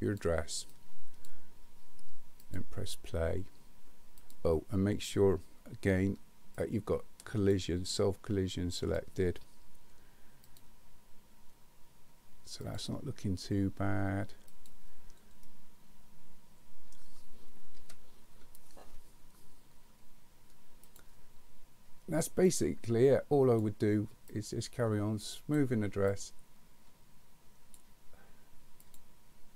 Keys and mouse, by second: 0.7 click, 2.4 click, 4.2 click, 6.6 click, 8.8 click, 10.5 click, 12.7 click, 14.6 click, 15.4-16.9 middle drag, 17.8 KP_1, 20.9 click, 22.5-23.6 drag, 24.3-25.6 drag, 26.1-27.8 drag.